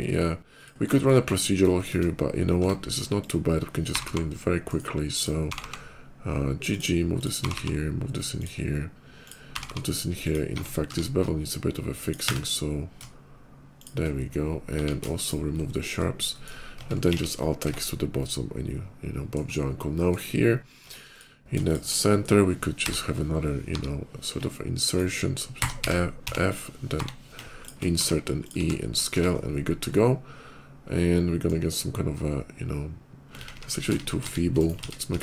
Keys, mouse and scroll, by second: 0.4 click, 0.4 1, 0.7 middle click, 1.6 shift+middle click, 2.4 Tab, 2.9 click, 3.6 g, 4.0 g, 4.5 right click, 4.8 click, 6.5 click, 6.7 g, 7.0 click, 8.2 click, 8.2 g, 9.1 click, 9.7 g, 10.0 click, 10.2 Tab, 10.6 q, 11.8 click, 12.1 1, 13.6 shift+click, 14.1 shift+middle click, 14.5 middle click, 14.5 q, 15.0 ctrl+shift+q, 15.0 click, 15.5 middle click, 16.0 middle click, 16.2 middle click, 16.6 Tab, 16.6 middle click, 16.9 alt+x, 17.0 Tab, 17.2 middle click, 17.8-19.2 middle drag, 19.6 middle click, 20.8 Tab, 21.0 click, 21.4 shift+click, 21.9 shift+middle click, 22.6 i, 24.7 right click, 25.2-28.4 typing, 27.4 click, 28.3 click, 28.8 click, 29.0 Tab, 29.2 middle click, 29.5 middle click, 29.6-31.2 middle drag, 31.5 scroll up 2, 32.2 scroll up 2, 33.2-35.2 typing, 34.4 right click.